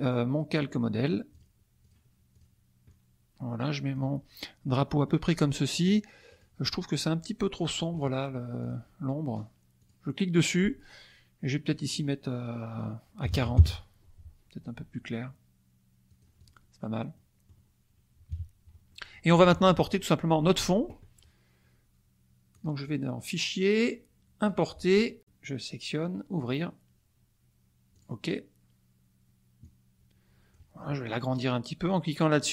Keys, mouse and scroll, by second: 1.3 click, 1.8 click, 2.3 click, 2.8-4.1 drag, 4.6-6.0 middle drag, 6.3 click, 8.6 click, 9.8 click, 11.7 click, 13.2 KP_4, 13.3 KP_0, 13.6 KP_Enter, 16.0 click, 17.1 click, 18.3 KP_Subtract, 18.9 middle click, 22.5 click, 24.5 click, 26.3 click, 27.9 click, 29.7-30.7 drag, 32.0-32.5 drag.